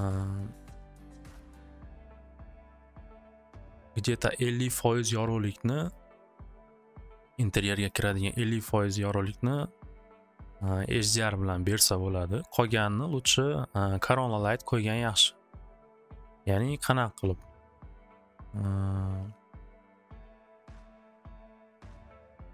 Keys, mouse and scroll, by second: 0.0-3.1 drag, 6.0 click, 6.3 click, 6.7 click, 7.2 click, 7.9 click, 12.4 click, 16.2 click, 18.0 click, 22.0 click.